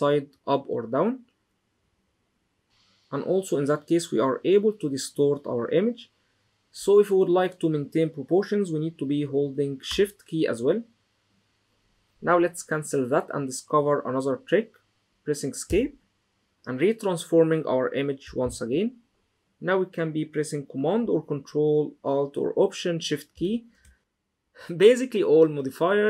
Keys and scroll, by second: 15.4 Escape, 18.2 super+t.